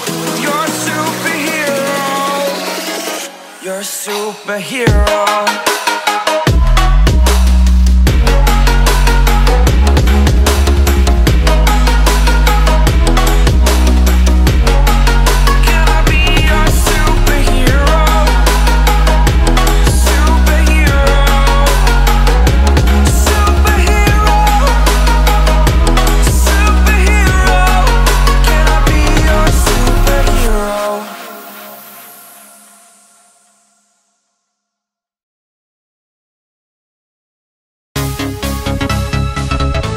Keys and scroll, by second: 0.3 p, 10.1 a, 11.7 space, 13.0-16.5 typing, 26.3 a, 27.2 v, 28.1 a, 32.8 v, 34.2 v, 35.9 shift+super+[, 36.3 super+], 37.5 space, 38.1 a.